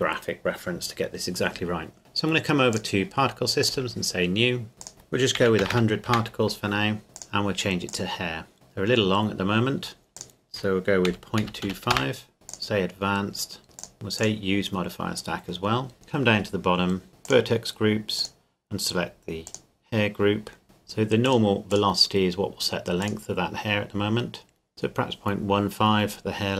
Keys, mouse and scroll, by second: 2.7 click, 4.8 click, 5.4 KP_1, 5.6 KP_0, 6.1 KP_Enter, 7.1 KP_Enter, 7.6 click, 8.5 z, 10.1 z, 11.1 KP_Decimal, 11.4 KP_2, 11.6 KP_5, 11.9 KP_Enter, 12.3 middle click, 12.5 click, 14.2 click, 15.7-16.2 scroll down 1, 16.2 scroll up 1, 16.3 scroll down 1, 16.5-17.3 scroll up 1, 17.3 click, 21.3 click, 23.6-24.7 scroll down 1, 24.7 click, 25.3-26.5 scroll down 1.